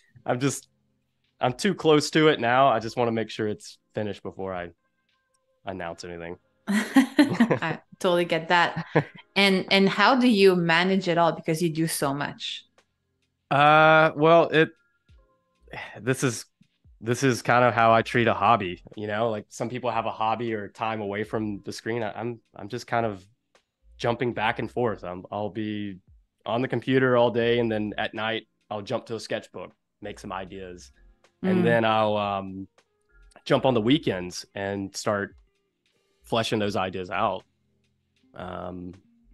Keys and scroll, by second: 1.3 super+y, 2.4 shift+super+[, 3.3 a, 3.9 space, 34.3 z, 35.1 a.